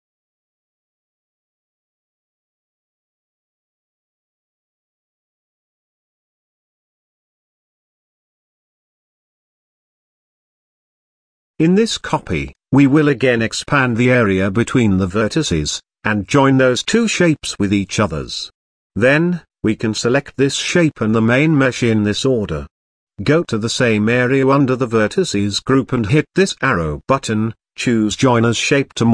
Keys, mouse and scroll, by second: 0.2 shift+middle click, 0.9 Tab, 1.5 a, 4.0 Tab, 4.6-5.3 scroll down 1, 5.3 z, 5.8-6.3 middle drag, 6.3 click, 7.1 click, 7.8-8.2 shift+middle drag, 8.2-8.8 scroll up 3, 8.8 s, 9.0 1, 9.7 s, 11.4 s, 12.5 s, 13.4 z, 14.1-14.8 scroll down 1, 14.8 s, 17.8-18.4 scroll down 3, 18.4 Tab, 18.7 click, 19.1-19.6 scroll down 1, 19.6-21.1 shift+middle drag, 21.1 click, 22.1 click, 23.0 shift+click, 27.2-29.1 drag.